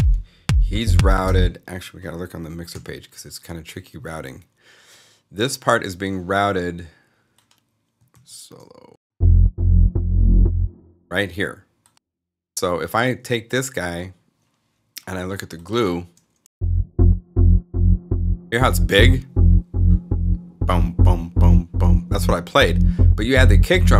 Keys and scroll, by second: 1.0 space, 2.6 x, 8.1 alt+s, 10.3 space.